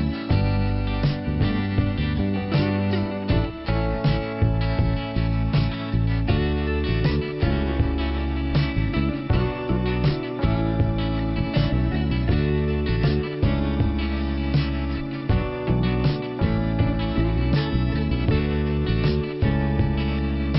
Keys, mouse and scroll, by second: 0.9 click, 2.4 click, 3.3 click, 4.6 scroll down 1, 5.4 click, 6.7 click, 9.3 middle click, 11.8 middle click, 14.7 click, 16.6 middle click, 17.9-18.4 scroll down 1, 20.0 click.